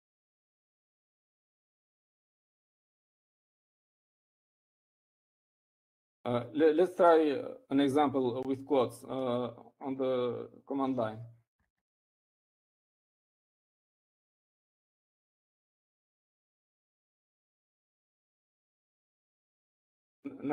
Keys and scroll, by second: 17.1-18.1 typing, 19.4 typing.